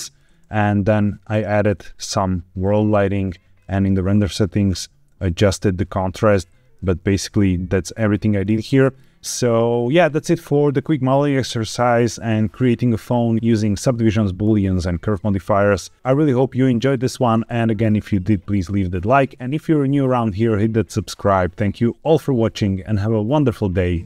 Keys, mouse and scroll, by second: 1.2 click, 3.5 click, 3.9-4.8 scroll down 5, 6.8-8.1 shift+middle drag, 8.4-8.8 scroll up 2, 8.9 shift+middle click.